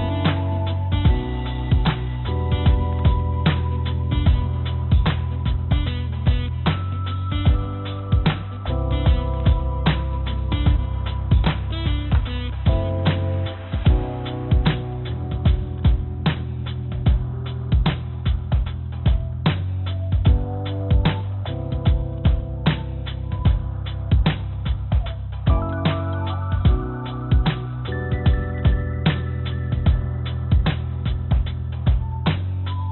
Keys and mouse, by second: 1.1 click, 2.8 click, 3.5 i, 6.6 1, 7.5 2, 8.7 g, 12.0 3, 13.0 click, 13.8 e, 15.7 click, 16.6 2, 18.2 g, 19.7 click, 20.5 2, 21.0 click, 22.0 y, 22.9 g, 24.0 click, 24.7 click, 25.4 g, 26.5 click, 27.5 click, 29.0 click, 29.6 g, 31.6 click, 32.6 y.